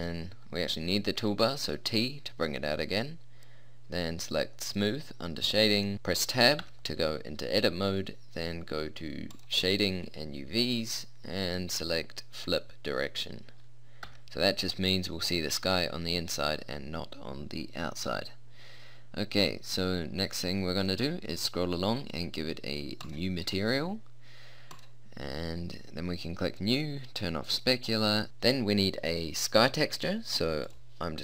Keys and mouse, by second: 0.0 t, 4.6-6.0 drag, 6.0 Tab, 6.6 Tab, 10.8 click, 12.4 click, 14.0 Tab, 15.2 click, 17.6 middle click, 20.0-23.0 middle drag, 23.0-24.8 drag, 25.1-26.4 drag, 26.6 middle click, 27.4 click, 28.2-30.8 middle drag.